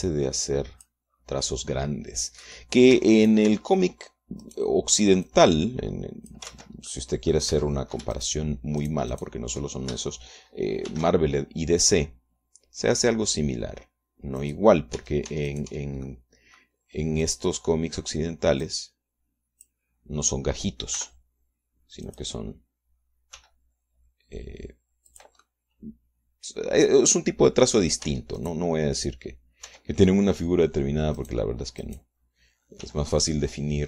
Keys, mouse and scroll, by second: 0.7-2.3 drag, 2.3 scroll down 2, 2.6-3.9 drag, 4.1 Tab, 4.4 click, 5.7 click, 6.5-7.7 drag, 7.7 ctrl+z, 8.1 ctrl+click, 8.7 Tab, 9.3 shift+click, 10.0 shift+click, 12.1 shift+d, 15.6 click, 16.2 Tab, 16.7 middle click, 17.0-17.3 scroll up 1, 17.3 middle click, 17.9 scroll up 1, 18.5 middle click, 18.8 scroll up 1, 18.9 middle click, 19.9-21.1 drag, 22.2 r, 23.3 click, 24.6 g, 26.3 click, 27.7-29.2 drag, 29.3 Tab, 29.6 right click, 30.9 Tab, 32.4 right click, 32.7 middle click, 33.1 right click.